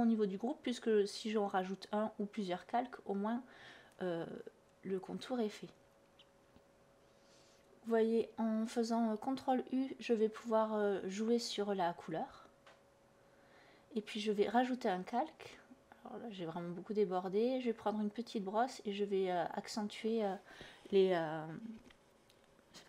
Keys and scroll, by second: 0.7 /, 6.8 ctrl+u, 16.0 ctrl+alt+z, 17.5 ctrl+z.